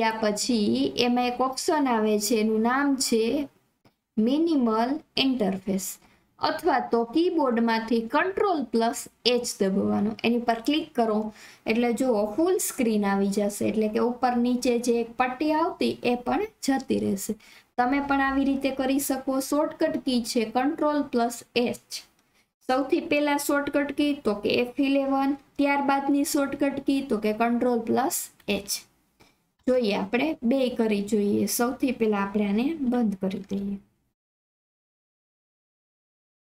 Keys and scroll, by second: 33.4 alt+F4, 34.2 Escape.